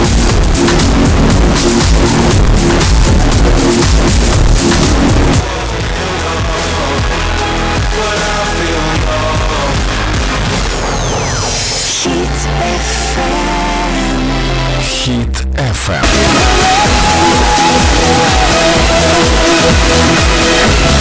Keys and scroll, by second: 5.4 Page_Down.